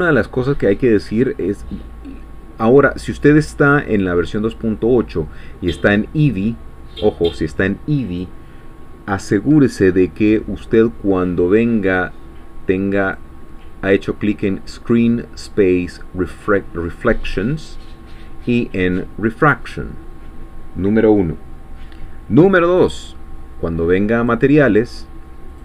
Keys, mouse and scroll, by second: 0.6 scroll down 2, 1.2 scroll up 2, 3.9 click, 6.2 click, 8.1 click, 13.0 click, 17.3 click, 19.3 click, 24.2 click, 25.5 click.